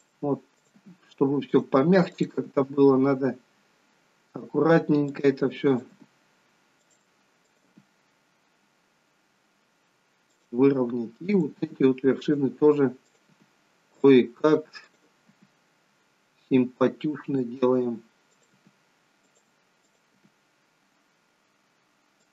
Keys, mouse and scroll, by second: 0.5 click, 0.9 g, 2.1 click, 2.2 g, 5.7 click, 5.9 g, 7.4 click, 7.6 g, 11.2 click, 12.0 g, 12.9 click, 13.2 g, 14.8 click, 15.2 g, 18.2 click, 18.4 g, 19.8 click, 20.1 g.